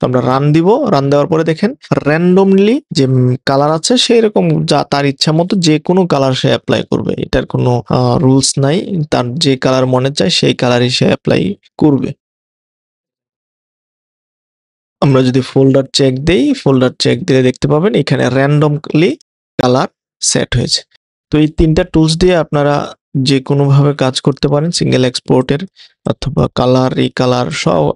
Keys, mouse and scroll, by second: 21.6 click, 22.1 click, 22.7 click, 24.1 click, 24.6 click.